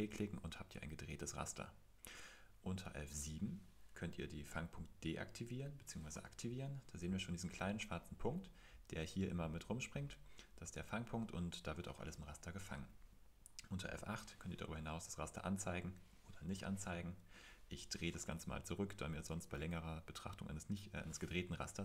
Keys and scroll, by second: 4.7 F7, 5.7 F7, 13.9 F8, 16.5 F8, 17.8 F6.